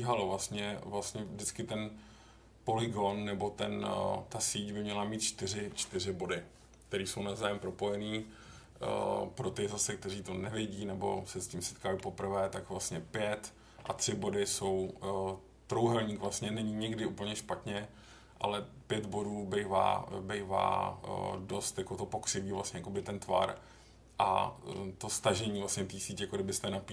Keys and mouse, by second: 11.3 middle click, 20.1-21.3 middle drag, 22.6 middle click, 23.5-24.7 middle drag.